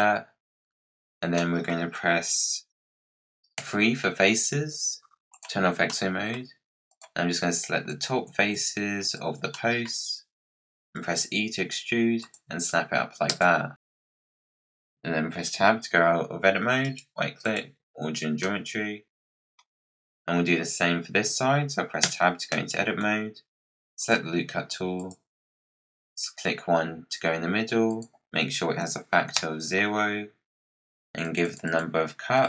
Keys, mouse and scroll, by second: 0.4-1.3 scroll up 7, 1.3 middle click, 1.6-2.3 scroll down 5, 3.5 3, 5.2 click, 5.7 scroll up 1, 5.8-6.8 middle drag, 6.8 click, 7.8 shift+click, 8.9 shift+click, 9.4 middle click, 9.8-10.7 scroll down 5, 10.9 e, 13.2 Tab, 16.7-18.3 right drag, 18.3-19.9 middle drag, 19.9-21.1 scroll down 4, 22.0 Tab, 22.4-23.9 middle drag, 23.9-30.8 drag, 31.1-32.4 drag.